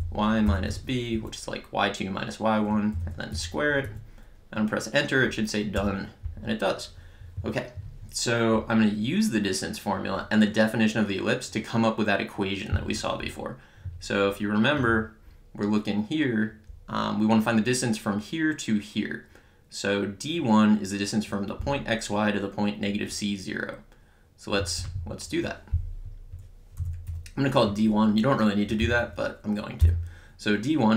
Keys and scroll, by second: 0.0-1.2 typing, 2.9 ^, 3.3 2, 3.7 Right, 5.8 Return, 24.8 Return, 26.8 d, 27.1 1, 29.8 =.